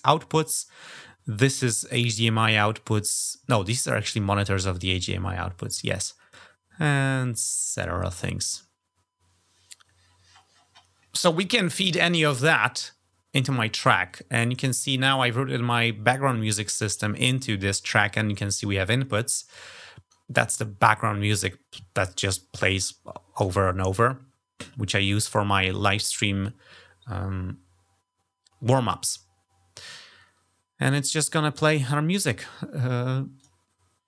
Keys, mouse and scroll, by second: 0.3-0.7 scroll down 3, 9.8-10.7 scroll up 4, 13.9 click, 33.1 click.